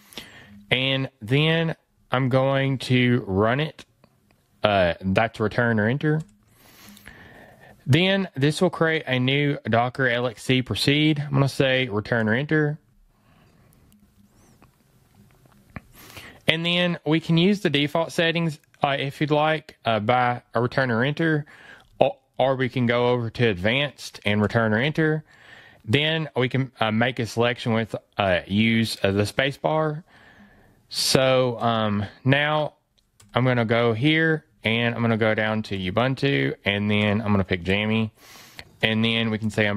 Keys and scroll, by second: 1.3 fn+Right, 21.9 fn+Right, 34.5 fn+Down.